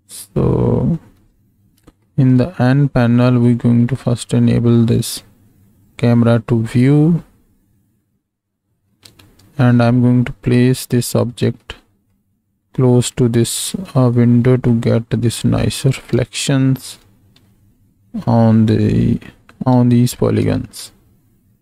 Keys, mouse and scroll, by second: 1.1 n, 2.0-2.3 shift+drag, 3.5 click, 5.8 click, 6.4-8.9 middle drag, 9.6-10.9 ctrl+middle drag, 11.6 middle click, 13.1-14.1 middle drag, 14.7 ctrl+middle click, 15.6 middle click, 16.2-16.9 shift+middle drag, 17.4-18.9 ctrl+middle drag, 19.8-20.4 shift+drag, 20.7-21.6 ctrl+drag.